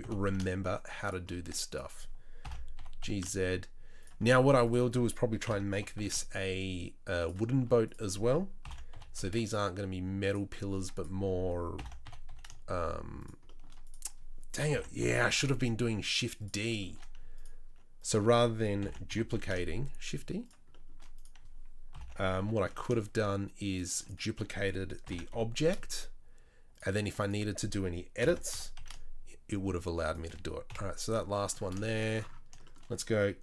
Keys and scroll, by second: 0.0 g, 2.4 ctrl+l, 2.7 g, 5.4 ctrl+l, 5.7 g, 8.6 ctrl+l, 8.9 g, 11.7 ctrl+l, 12.0 g, 14.7 ctrl+l, 15.0 g, 18.8 ctrl+l, 19.1 g, 21.9 ctrl+l, 22.4 g, 25.0 ctrl+l, 25.3 g, 28.2 ctrl+l, 28.5 g, 30.7 KP_7.